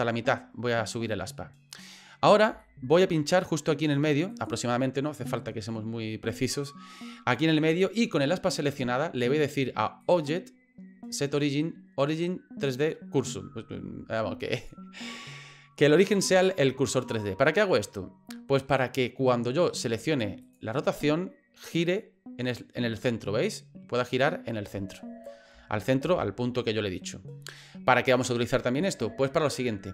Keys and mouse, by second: 2.6 shift+middle click, 4.3 click, 10.1-14.7 drag, 20.4 click, 21.8-25.3 drag, 26.0 ctrl+z.